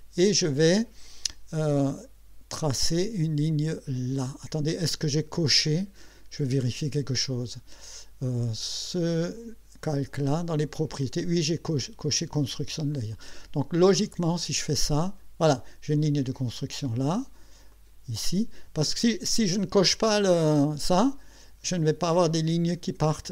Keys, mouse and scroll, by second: 10.0 click, 12.9 click, 14.7 click, 17.7 click, 19.9 click, 22.3 click.